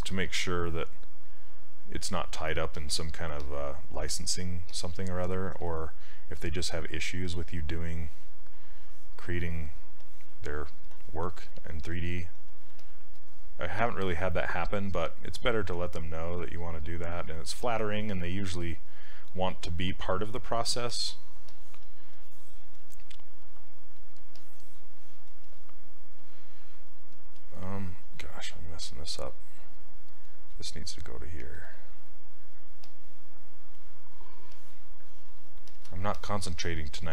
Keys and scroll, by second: 4.1 s, 12.8 s, 13.9 s.